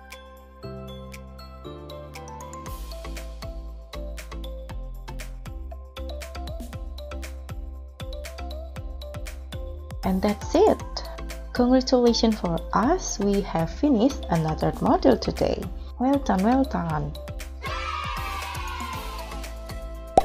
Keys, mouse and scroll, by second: 6.6 double click, 7.7 3, 7.9 0, 7.9 0, 8.6 Return.